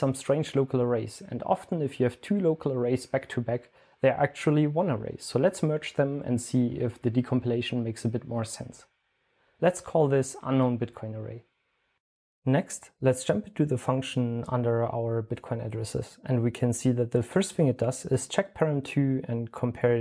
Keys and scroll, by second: 5.4 super+l, 5.4-8.4 typing, 9.4-12.2 typing.